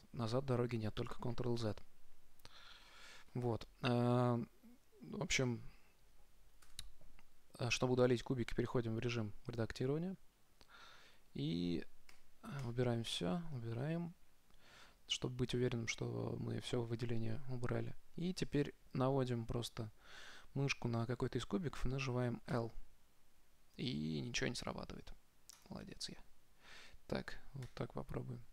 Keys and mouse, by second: 2.5-6.8 middle drag, 7.0 Tab, 12.4 a, 12.9 a, 13.5 a, 22.8 l, 25.9 click, 27.9 l.